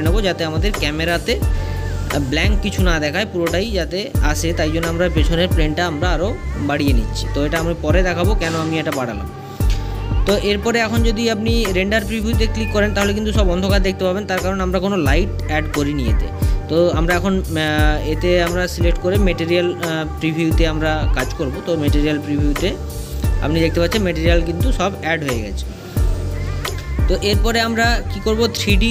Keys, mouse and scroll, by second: 1.3 click, 2.2-5.3 middle drag, 5.9 scroll up 3, 6.6 scroll down 1, 7.1 middle click, 9.3 click, 10.4-10.7 scroll up 2, 11.1-11.4 scroll down 1, 11.5-14.2 middle drag, 14.2 space, 16.8 click, 19.0 click, 20.8-21.8 middle drag, 21.8 scroll up 1, 21.8 scroll down 2.